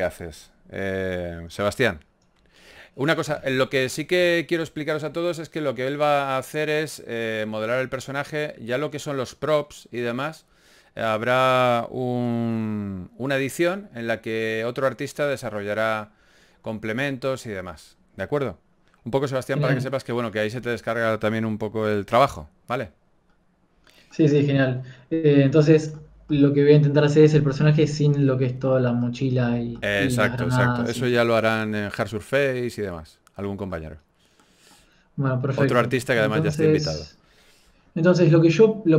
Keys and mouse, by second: 1.6 middle click, 2.3-4.6 drag.